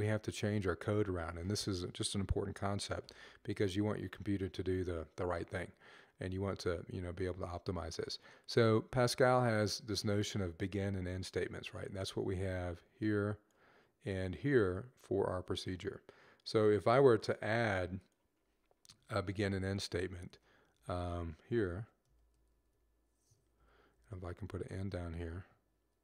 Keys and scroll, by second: 19.2 Left, 21.5-23.1 typing, 23.4 Down, 23.8 Left, 24.0 Left, 24.2 Down, 24.3-26.0 typing.